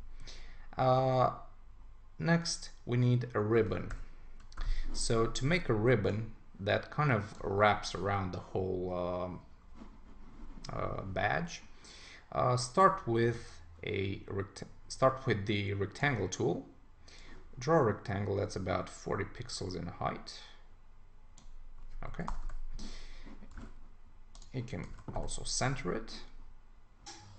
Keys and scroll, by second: 3.9 super+-, 22.3 Return, 23.6 super+a, 24.9 super+d.